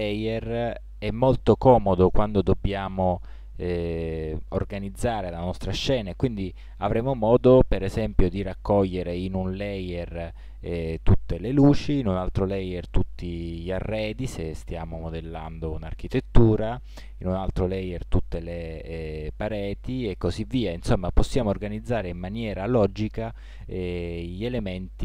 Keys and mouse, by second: 8.4-10.1 drag, 20.3-22.0 drag.